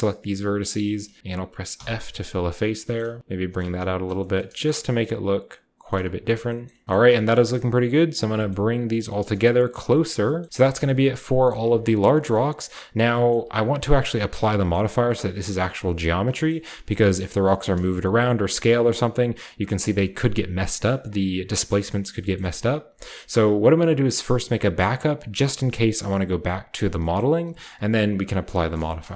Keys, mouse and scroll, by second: 0.0 shift+middle click, 0.2 shift+right click, 0.6 shift+middle click, 0.7 shift+right click, 1.7 f, 1.9-3.2 scroll down 1, 3.0 g, 3.2-4.4 scroll up 1, 3.4 click, 3.6 Tab, 4.0-4.5 typing, 4.4 shift+scroll down 1, 4.5-5.1 shift+drag, 4.5 shift+scroll up 1, 4.6-4.9 shift+middle drag, 4.6-6.4 shift+scroll down 1, 5.8 shift+middle click, 6.0-11.2 typing, 6.9 shift+middle click, 7.6 middle drag, 7.8-10.2 drag, 7.8-8.3 scroll down 1, 8.5-10.0 scroll up 1, 10.0 scroll up 1, 11.6 ctrl+s, 12.9-13.6 shift+middle drag, 13.3-15.9 shift+scroll up 1, 13.6 Tab, 14.3 Tab, 16.2-19.5 scroll down 1, 16.5-21.7 shift+middle drag, 16.7 g, 18.0 s, 19.7-21.7 scroll down 1, 19.8 s, 22.4 shift+a, 22.6-24.2 shift+middle drag, 22.6-24.2 shift+scroll up 1, 24.2-25.0 scroll up 1, 25.1-26.7 drag, 25.5 Tab, 27.1-28.4 middle drag, 27.2 Tab, 28.4-29.1 scroll down 1, 29.0-29.1 shift+middle drag.